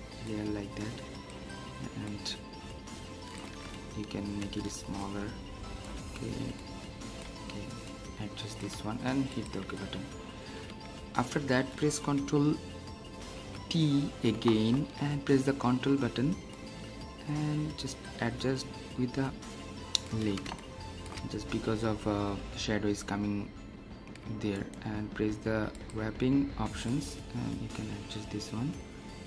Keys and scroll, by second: 13.3 ctrl+t.